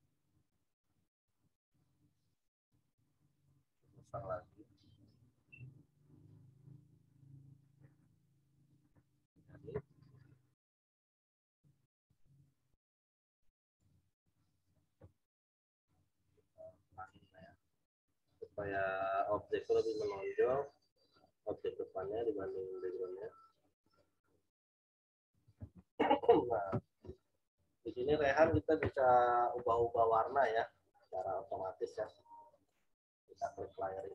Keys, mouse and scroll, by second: 8.0 Return, 11.4 click, 25.3 z, 29.7 v, 30.4 right click, 31.1 click, 32.0 right click, 32.6 click, 33.9 right click.